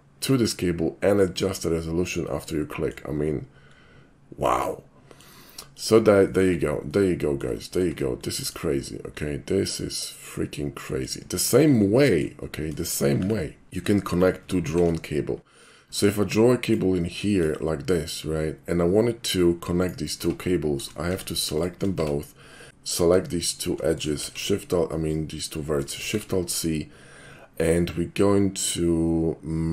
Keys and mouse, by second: 2.3-3.0 middle drag, 4.0 middle click, 4.7-5.2 middle drag, 5.7 click, 6.3 shift+click, 6.8-7.4 shift+middle drag, 7.7 shift+middle click, 8.2 shift+middle drag, 9.3-11.1 shift+middle drag, 11.5 shift+middle click, 12.0 shift+middle click, 12.8 shift+middle click, 13.2 2, 13.7 shift+middle click, 14.1 shift+click, 14.7 alt+shift+c, 16.6 click, 17.2 click, 20.3 Tab, 21.2 Tab, 21.6 shift+click, 22.0 Tab, 22.9 shift+click, 24.2 alt+shift+c, 26.0 alt+shift+c.